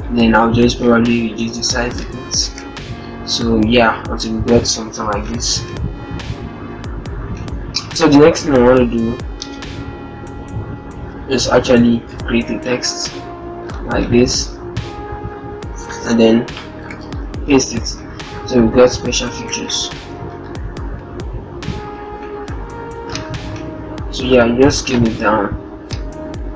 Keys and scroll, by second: 2.4 alt+shift+Up, 5.4 alt+shift+Down, 6.5 Down, 16.8 ctrl+v, 18.2 ctrl+Return, 19.4 ctrl+-, 19.5 0, 19.9 t, 21.5 ctrl+-.